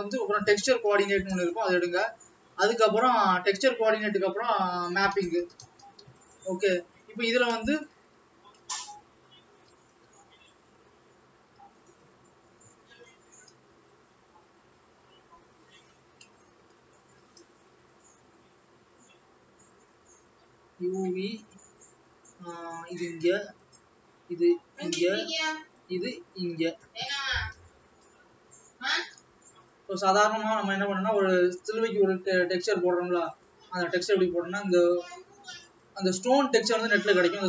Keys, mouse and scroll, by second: 31.2 click.